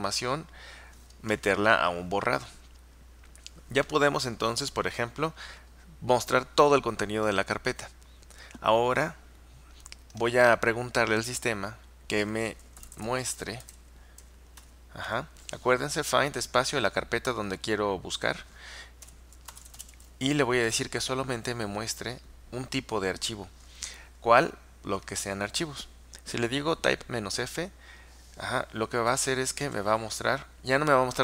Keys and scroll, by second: 12.7-15.2 typing, 19.3-20.7 typing, 29.1 Return.